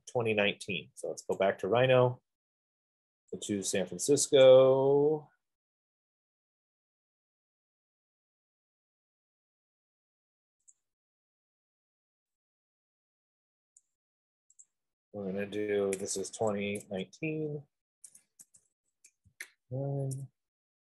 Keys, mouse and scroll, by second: 1.9 click, 4.7 click, 5.1 middle click, 5.6-6.1 scroll, 6.5-7.2 scroll, 7.6-8.3 scroll, 8.3 middle click, 8.8 middle click, 9.6 middle click, 9.7 middle click, 11.2 click, 13.2 scroll, 14.1 click, 14.9 click, 16.6-17.3 typing, 18.6-19.9 typing.